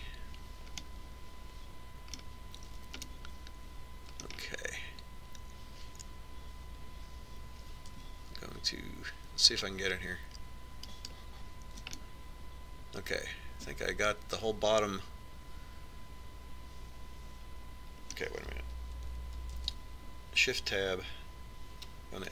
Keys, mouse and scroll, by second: 1.1-4.3 middle drag, 4.8-6.7 middle drag, 12.7-14.3 right drag, 13.8 click, 14.3-15.4 middle drag, 21.4 ctrl+Tab.